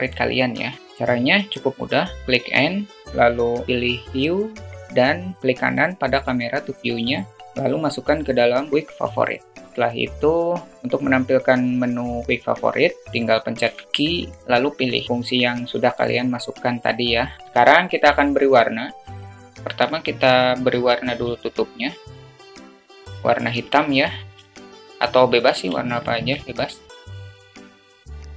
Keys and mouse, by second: 1.7 click, 2.3 n, 10.3 n, 13.7 q, 17.3 click, 17.5 ctrl+s, 20.1 click, 21.1 click, 24.4 shift+middle click, 25.7-26.1 shift+middle drag, 27.4 click.